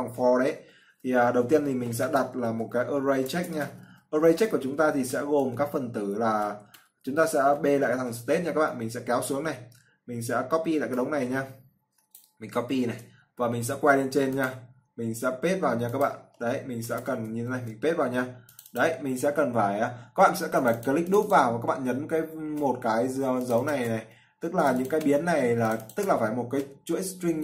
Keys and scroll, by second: 13.1 ctrl+c, 17.8 ctrl+v.